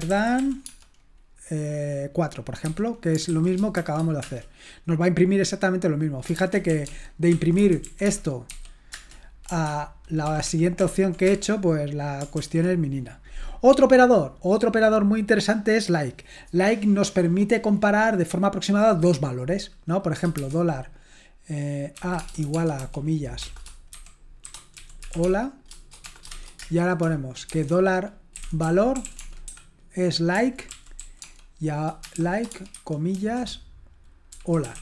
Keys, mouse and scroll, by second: 0.0-0.9 typing, 3.0-4.2 typing, 6.3-8.5 typing, 8.9 Return, 10.5 ctrl+p, 10.8 ctrl+p, 11.0-11.8 typing, 12.4 ctrl+l, 13.9-14.5 scroll down 1, 14.5-15.8 scroll down 1, 15.8-19.9 scroll down 1, 19.9-20.4 scroll down 1, 20.4 typing, 21.9-34.8 typing.